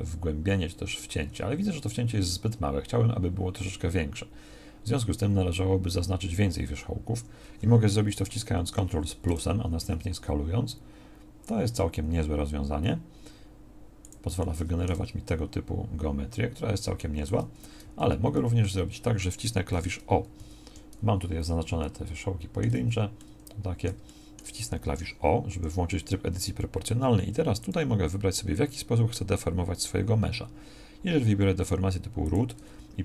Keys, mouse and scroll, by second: 8.7 ctrl+KP_Add, 9.9 s, 15.0 Tab, 22.8 z, 25.5 o.